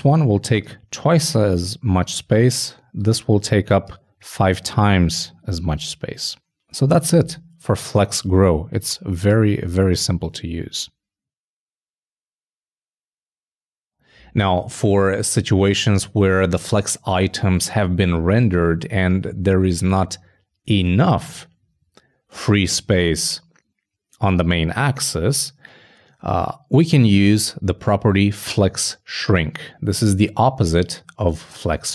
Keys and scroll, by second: 9.7 super+s.